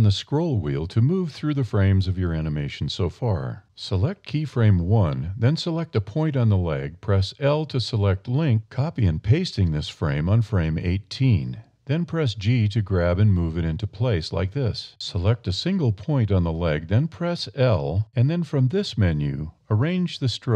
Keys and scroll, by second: 5.3 1, 5.8 super+i, 6.0 super+c, 6.7 super+a, 7.4 a, 8.9 super+v, 11.0 g, 14.3 a, 15.6 a, 17.3 1.